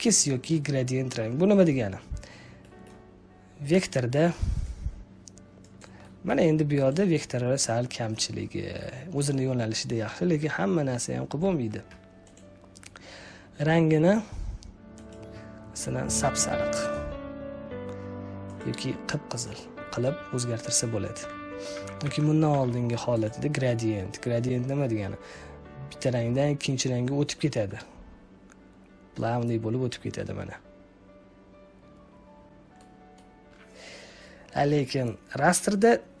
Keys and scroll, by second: 21.7 ctrl+z, 22.4 z.